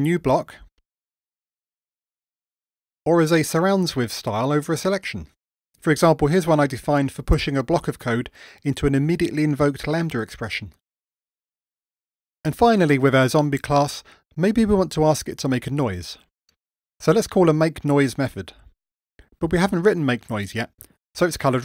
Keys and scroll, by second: 2.2 Return, 2.8 super+z, 5.9 alt+super+j.